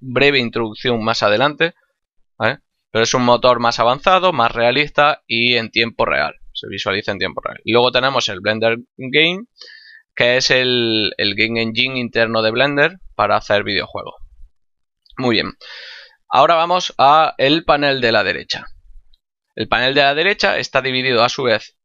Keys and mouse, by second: 1.8 click, 11.2 click.